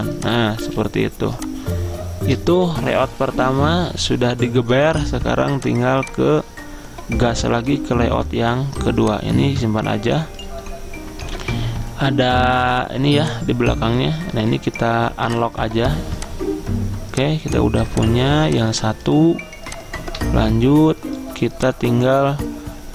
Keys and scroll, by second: 0.7 z, 11.5 ctrl+z.